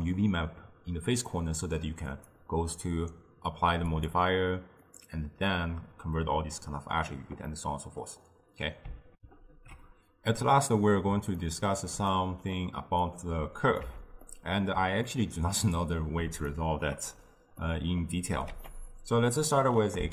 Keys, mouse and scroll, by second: 2.2 click, 4.0 click, 4.9-7.6 drag, 7.6-9.2 middle drag, 9.2 ctrl+alt+shift+w, 11.4-13.1 ctrl+middle drag, 13.1-13.9 drag, 13.9 x, 14.3-18.6 middle drag, 18.6 ctrl+a.